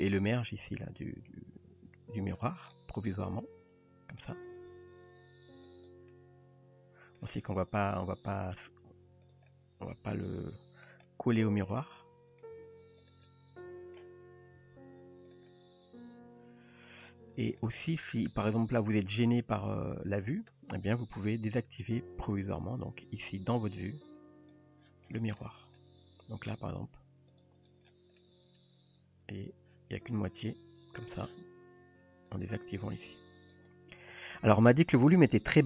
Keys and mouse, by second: 0.2 click, 0.9 click, 3.4-4.2 middle drag, 4.7 g, 6.1-7.2 middle drag, 8.0-8.6 middle drag, 9.3 drag, 9.5-10.9 middle drag, 11.1-11.8 middle drag, 12.0-12.4 middle drag, 12.6 g, 13.3 middle click, 14.6 r, 15.5-16.9 middle drag, 17.7 middle drag, 19.2-19.5 middle drag, 24.3 click, 26.5 g, 28.2-31.1 middle drag, 33.6 click.